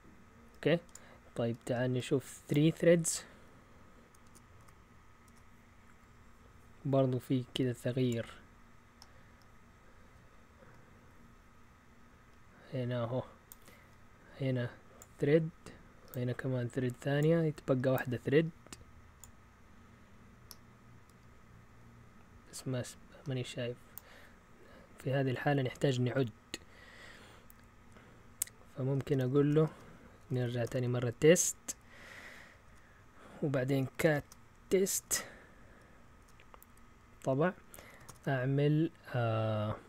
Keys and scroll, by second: 4.2 BackSpace, 4.6 3, 5.2 Return, 29.6-30.9 typing, 32.6 Return, 33.4-38.5 typing.